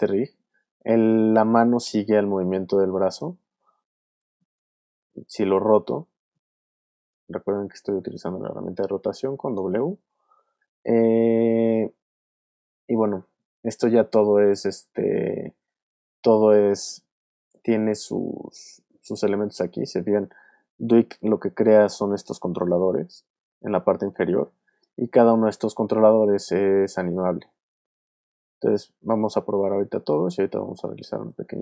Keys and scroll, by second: 0.1 space, 4.0 w, 11.5 super+z, 14.6 super+z, 30.0 alt+space, 30.7 space.